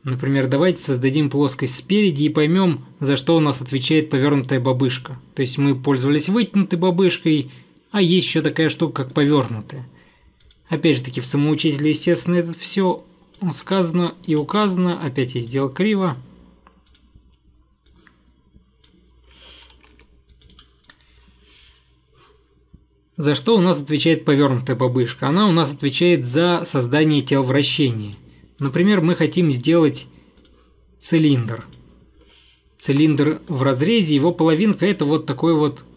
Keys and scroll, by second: 14.4 Delete, 19.9 Escape, 20.1 Escape, 20.6 Delete, 33.1 Escape.